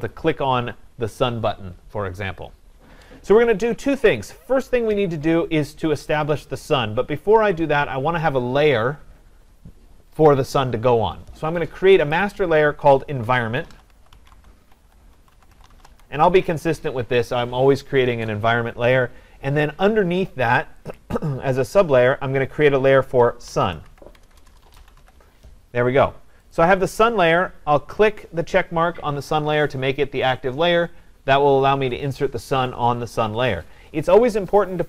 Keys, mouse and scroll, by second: 0.1 click, 12.1 click, 13.4-16.4 typing, 14.1-18.7 drag, 21.0-22.8 drag, 23.2-25.5 typing, 25.0-26.1 drag, 26.6-31.6 drag.